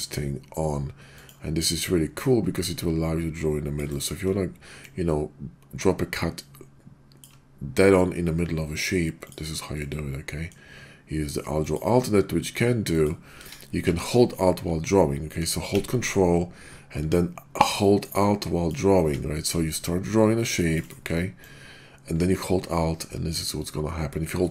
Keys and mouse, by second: 2.2-3.8 ctrl+drag, 3.9 click, 4.8-7.2 ctrl+drag, 9.3-9.8 drag, 9.8-10.5 middle drag, 11.7-13.3 drag, 13.5 ctrl+z, 13.8 ctrl+z, 17.7-19.1 ctrl+alt+drag, 19.7-20.7 ctrl+drag, 21.4-24.5 ctrl+drag.